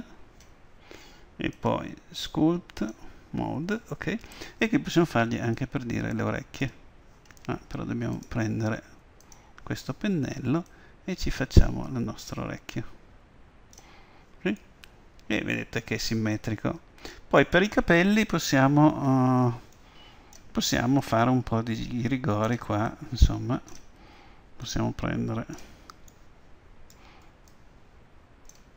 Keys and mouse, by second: 1.6-3.3 drag, 5.6-7.5 drag, 8.2-10.1 drag, 10.8-12.7 drag, 14.6-16.6 middle drag, 20.1-26.2 middle drag, 21.1-26.5 drag, 26.5-27.6 middle drag, 27.6-28.7 drag.